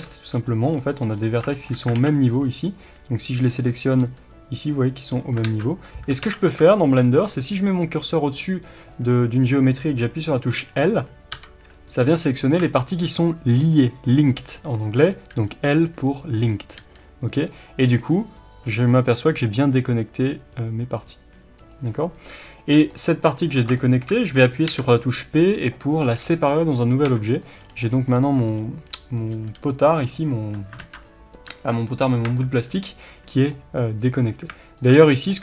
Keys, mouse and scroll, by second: 0.7 scroll down 1, 1.9 alt+a, 2.3-3.5 right drag, 3.5 click, 4.0 g, 5.0 click, 5.4 ctrl+z, 5.8-6.2 scroll down 1, 6.2 alt+a, 6.5 scroll down 1, 6.6-21.7 shift+middle drag, 16.7 g, 21.7 right click, 22.4 scroll up 1, 22.7 scroll down 1, 22.9-27.3 middle drag, 24.6 p, 27.0 Tab, 27.3 click, 27.6 scroll down 1, 27.8-30.1 middle drag, 28.1 scroll up 1, 29.3 g, 30.1 click, 31.3 ctrl+z, 31.9-34.7 middle drag, 32.2 Tab, 34.7 alt+click, 35.0 middle click.